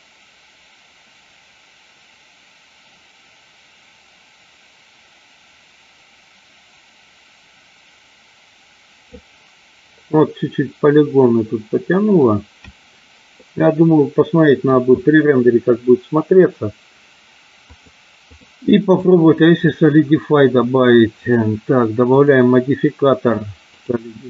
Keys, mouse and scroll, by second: 11.3-12.4 middle drag, 13.4-15.0 middle drag, 17.7 click, 19.1 click, 21.1 click, 22.0-24.0 drag.